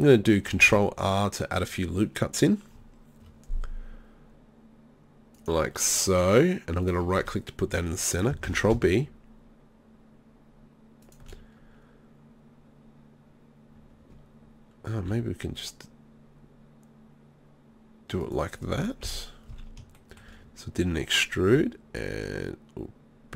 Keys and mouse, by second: 0.6 ctrl+r, 6.9-8.5 drag, 8.5 ctrl+b, 11.1-15.0 drag, 15.0 e, 18.3 click, 19.1 KP_3, 19.5 z, 19.9 middle click, 21.5 g.